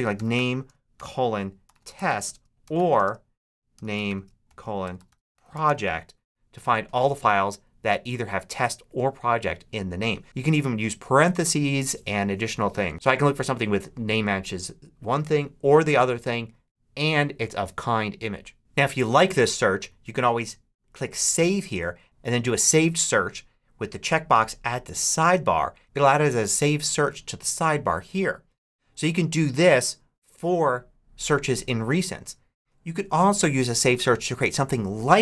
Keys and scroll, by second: 0.0-6.0 typing, 18.6 Return.